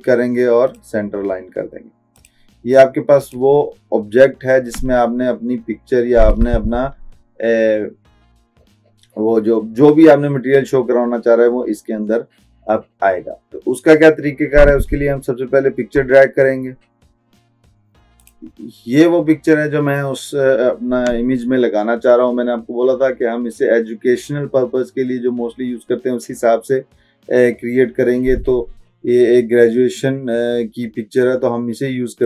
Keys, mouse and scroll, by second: 18.3 click.